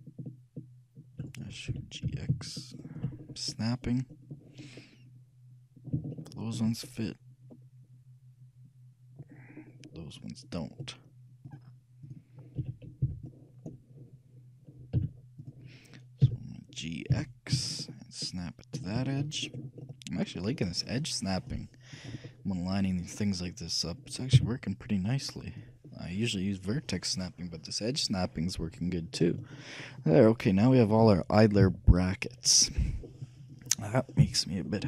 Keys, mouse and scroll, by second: 1.9 g, 3.3-8.8 middle drag, 9.7-11.2 middle drag, 11.6-13.5 drag, 12.7 a, 13.3 b, 15.1 z, 16.3 g, 17.9 click, 17.9 right click, 18.9 click, 19.2-21.3 middle drag, 21.5-23.2 drag, 24.5 z, 27.9 z, 29.2-31.6 middle drag, 31.7 KP_3, 33.0-34.7 middle drag, 34.7-34.8 scroll down 1.